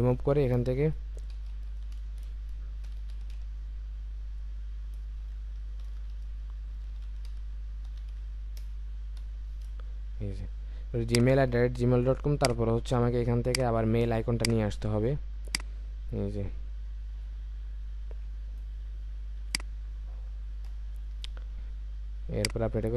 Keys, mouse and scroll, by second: 1.2-1.7 typing, 2.9-3.3 typing, 5.8-7.9 typing, 14.5 typing, 17.1 super+t, 17.8 Return, 22.3 Return.